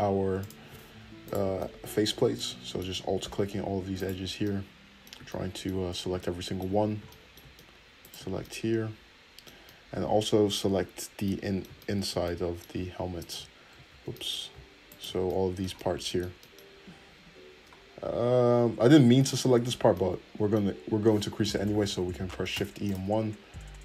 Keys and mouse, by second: 0.4 click, 0.9 alt+middle click, 1.2 alt+click, 1.3-4.0 alt+middle drag, 4.0 alt+shift+click, 4.1-8.0 middle drag, 8.0 shift+click, 8.1-13.2 shift+middle drag, 13.2 alt+shift+click, 13.8 ctrl+z, 14.9 alt+shift+click, 16.9-21.7 middle drag, 21.8 shift+e.